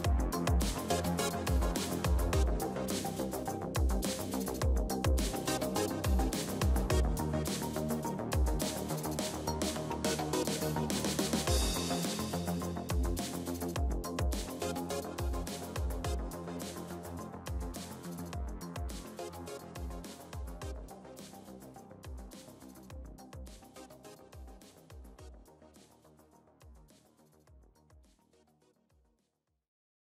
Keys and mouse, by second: 0.1 KP_3, 1.7 alt+h, 4.0 middle click, 4.5 z, 6.0 middle click, 10.9-12.7 middle drag, 12.7 z, 13.1-19.7 drag, 13.9 x, 15.3 x, 17.1 x, 19.0 f, 19.3 a, 19.7 ctrl+s, 20.2 z, 20.4 middle click, 20.8 middle click, 23.0 middle click, 23.2 middle click, 25.5-27.9 right drag, 27.2 ctrl+l, 27.9 KP_1, 29.4-30.0 drag.